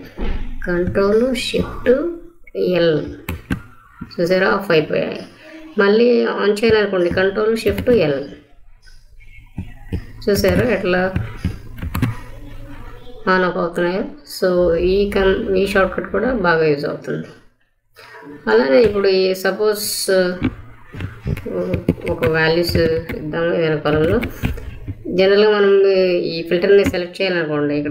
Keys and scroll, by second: 2.9 ctrl+shift+l, 7.6 ctrl+shift+l, 10.2 ctrl+shift+l, 11.7 ctrl+shift+l, 21.6 1, 22.0 Down, 22.7 2, 22.8 Down, 23.5 Down, 23.8 3, 24.0 Down, 24.8 Down.